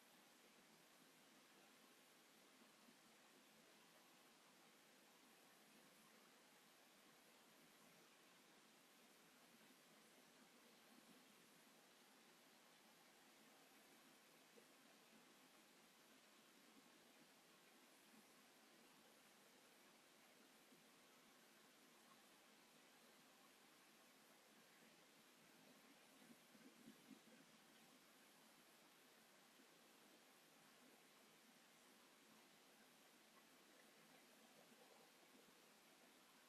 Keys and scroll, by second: 33.5 space, 34.1 shift+r, 36.3 space.